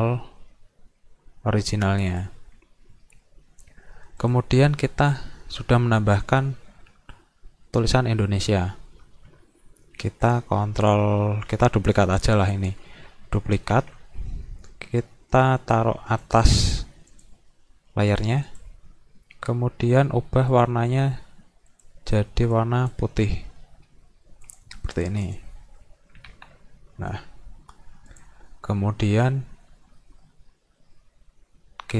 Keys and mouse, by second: 2.1 click, 4.2 click, 5.1 click, 12.1 drag, 12.5 click, 15.5-16.3 drag, 17.1 click, 18.1 click, 18.5 click, 20.5 click, 21.7 click, 22.6 click, 24.5 click, 25.3 click, 28.1 click.